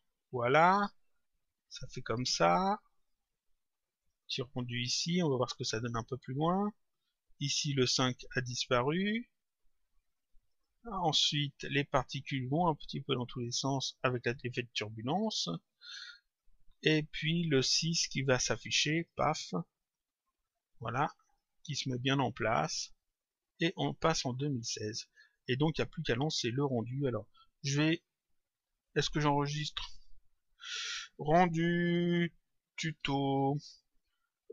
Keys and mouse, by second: 2.9 click, 5.4 click, 7.8 click, 10.4 click, 13.2 click, 16.2 click, 19.0 click, 21.1 click, 22.7 click, 25.5 click, 26.5 click, 29.8 click.